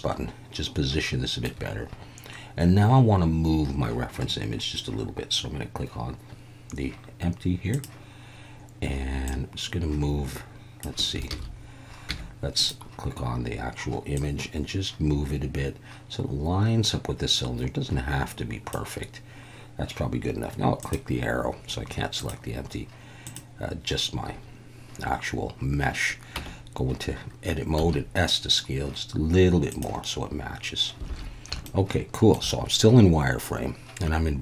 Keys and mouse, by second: 9.4-10.8 drag, 11.3 ctrl+z, 12.1 Tab, 12.6 click, 14.2-18.7 drag, 20.8 click, 22.2 click, 23.3 click, 26.3 Tab, 27.8 s, 29.7 click, 31.1 alt+a, 31.6 shift+middle click.